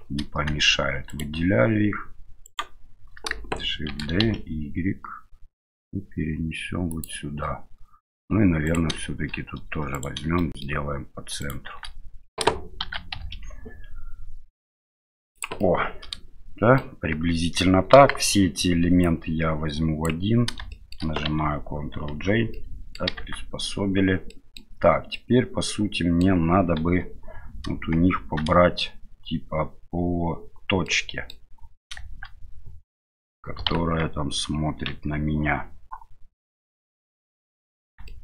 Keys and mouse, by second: 1.1 shift+right click, 2.4 shift+right click, 3.9 shift+d, 8.7 right click, 9.9 right click, 10.4 shift+middle click, 11.4 shift+right click, 12.8 shift+d, 15.7-16.8 middle drag, 17.9 KP_1, 19.1-20.0 drag, 20.7 middle drag, 22.1 ctrl+j, 22.5-22.9 middle drag, 23.2 Tab, 24.3 middle click, 25.1-26.2 middle drag, 26.8 KP_7, 28.1 shift+z, 30.8 middle click, 33.7 KP_1, 34.8 KP_3, 38.0 shift+middle click.